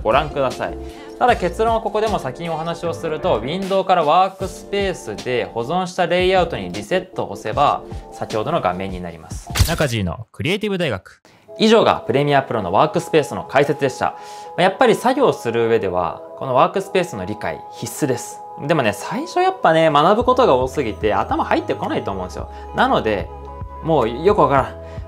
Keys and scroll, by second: 0.1-0.9 typing.